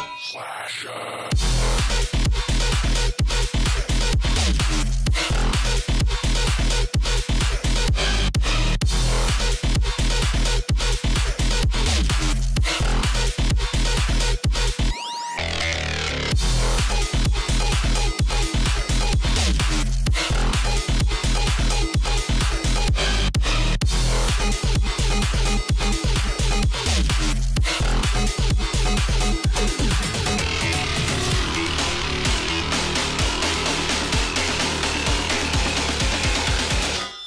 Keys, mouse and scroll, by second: 1.1-1.7 alt+scroll up 2, 1.2 click, 2.0 click, 3.1 alt+scroll down 1, 3.4 space, 3.5 click, 4.2 alt+scroll up 1, 5.1-6.7 alt+drag, 6.7 ctrl+d, 7.5 ctrl+scroll down 1, 8.3 scroll down 1, 8.5 ctrl+d, 9.7 alt+scroll down 1, 10.2 alt+scroll up 1, 10.2-12.6 drag, 12.6 shift+m, 13.2 alt+click, 14.2-16.1 alt+drag, 16.8 ctrl+g, 17.4 alt+scroll down 1, 17.6-19.2 drag, 19.2 ctrl+shift+[, 19.6 click, 19.8-20.2 alt+scroll down 1, 20.2 alt+scroll up 1, 20.5 click, 20.9 Left, 22.2 click, 22.8 alt+scroll up 1, 24.5 alt+scroll down 1, 24.7 alt+scroll up 1, 25.4 space, 26.3 click, 29.7 click, 32.3 shift+click.